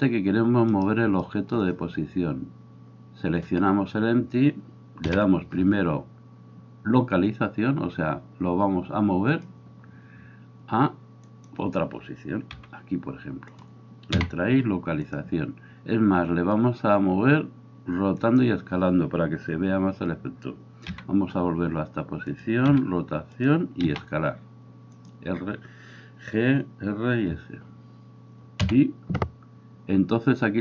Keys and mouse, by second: 0.8 right click, 5.0 i, 12.6 g, 13.7-18.3 middle drag, 14.1 i, 18.3-22.4 drag, 20.9 g, 22.4-30.6 middle drag, 22.7 r, 23.9 s, 28.7 i.